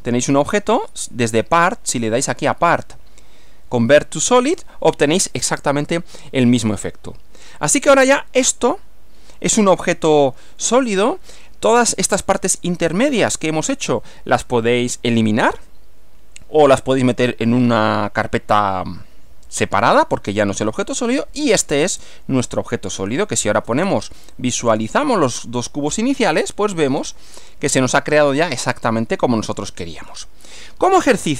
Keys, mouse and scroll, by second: 1.3 click, 2.2 click, 5.5 click, 6.3-8.9 middle drag, 9.9 middle click, 10.6 middle click, 20.9 click, 21.4 space, 23.3 click, 23.7 space, 24.3 click, 24.7 space, 25.3 click, 25.9 middle click, 27.0 click, 28.9-30.3 middle drag.